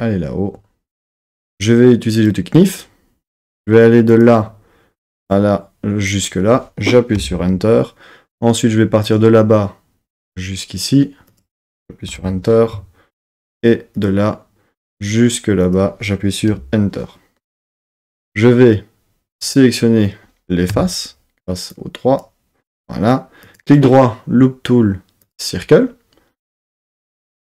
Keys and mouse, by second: 2.1 click, 4.1-7.5 drag, 9.1-12.3 drag, 13.9-17.4 drag, 19.3 click, 20.7 3, 21.7-22.7 drag, 23.5-25.5 right drag.